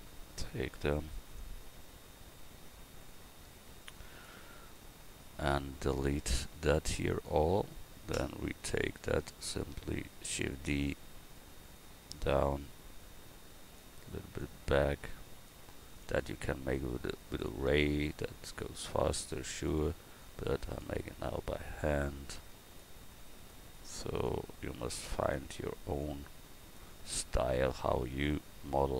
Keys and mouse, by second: 0.0 a, 1.2 b, 8.7 l, 10.2 shift+d, 11.8-13.8 drag, 15.9 shift+d, 19.4 shift+d, 23.4 shift+d, 27.2 Tab, 28.0 a.